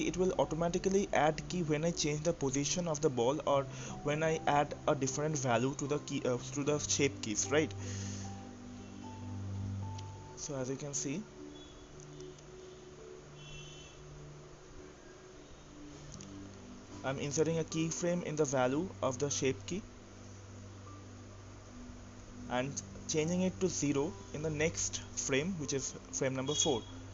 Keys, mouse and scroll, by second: 2.0-5.1 drag, 5.6-9.2 drag, 14.3 click, 17.8-18.7 right drag, 18.7-22.6 drag, 22.6-24.8 right drag, 24.8-27.1 drag.